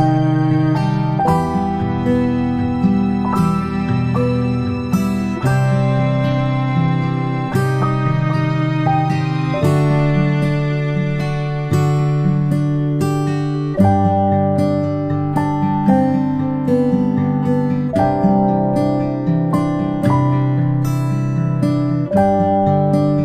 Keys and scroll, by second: 22.5 ctrl+z.